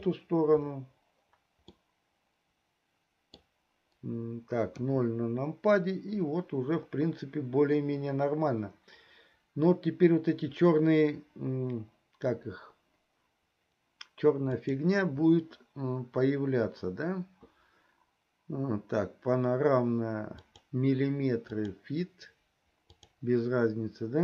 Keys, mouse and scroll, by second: 2.2-3.7 middle drag, 4.8 KP_0, 14.5 click, 20.4-22.0 drag, 23.5-24.2 drag.